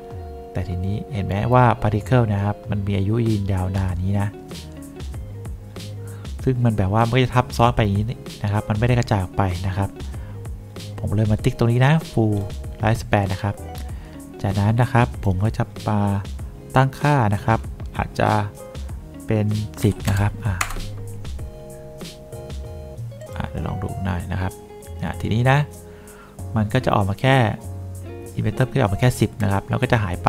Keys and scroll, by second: 19.9-20.9 typing, 20.9 Return.